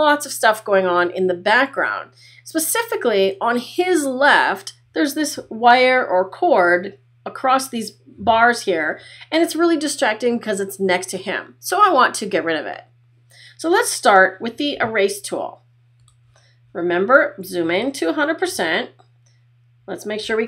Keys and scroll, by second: 17.5 space.